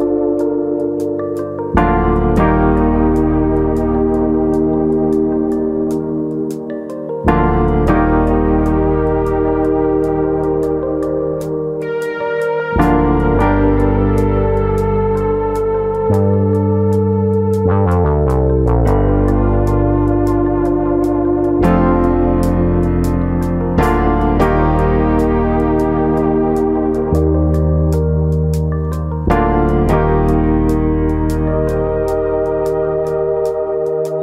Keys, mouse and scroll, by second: 0.1 click, 0.4 middle click, 1.5 scroll down 2, 1.7 middle click, 2.1 shift+middle click, 2.3 scroll down 1, 2.9 scroll down 1, 3.6 3, 4.2 alt+click, 5.0 ctrl+KP_Add, 6.1 ctrl+KP_Add, 6.3 middle click, 7.3 click, 8.9 click, 10.9-11.3 scroll down 3, 11.2 middle click, 11.7-12.7 scroll up 2, 11.9 shift+middle click, 12.7 alt+click, 13.4-13.8 ctrl+KP_Add, 15.0 click, 16.3 click, 17.5-18.0 scroll down 3, 17.9 middle click, 18.6 middle click, 19.1 scroll up 1, 19.4 middle click, 19.8 shift+middle click, 20.1 shift+middle click, 20.5 shift+middle click, 21.1 click, 21.4 l, 22.2 click, 23.1 middle click, 25.4 ctrl+r, 26.5 right click, 26.9 middle click, 27.6 alt+s, 29.7 click, 30.0 middle click, 30.8 ctrl+z, 31.4 ctrl+z, 31.7 middle click, 33.8 middle click.